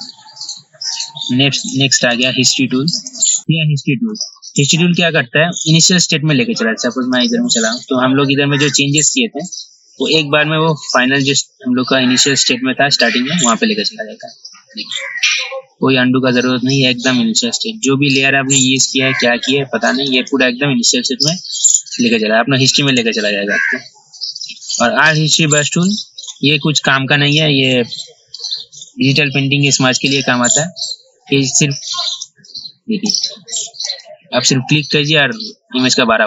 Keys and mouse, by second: 1.7 click, 2.2 right click, 3.1-20.3 drag, 23.1 right click, 26.0-36.2 drag.